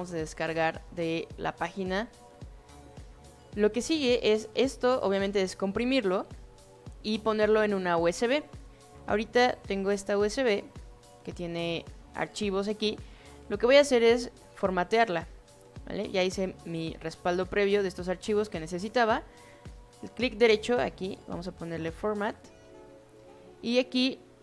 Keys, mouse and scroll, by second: 0.3-1.1 drag, 2.1-2.6 drag, 9.9 click, 10.5 click, 12.0 drag, 14.2 right click, 21.7 click, 23.0-23.3 drag, 23.8 click.